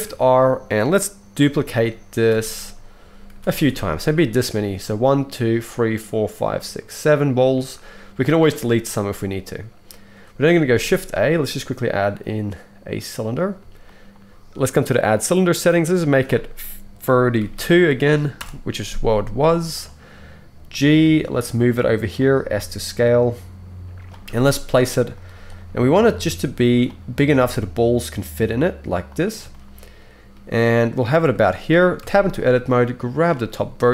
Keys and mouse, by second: 0.1 shift+r, 1.4 shift+r, 2.3 shift+r, 3.3 shift+r, 3.6 shift+r, 10.7 shift+a, 14.0-15.0 shift+middle drag, 15.0-22.1 drag, 21.0 g, 22.1-24.3 middle drag, 22.5 s, 24.3 g, 25.2 z, 26.1 s, 27.3 g, 29.7-32.6 shift+middle drag, 32.0 Tab, 32.6-33.9 drag.